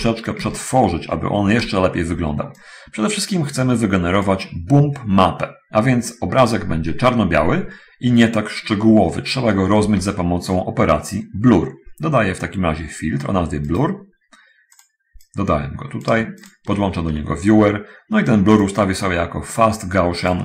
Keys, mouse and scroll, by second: 0.1 v, 0.8-2.0 ctrl+shift+drag, 2.5-4.7 drag, 9.9 shift+a, 14.0 click, 15.0 click, 15.5-16.3 drag, 16.7 ctrl+shift+click, 18.8 middle click.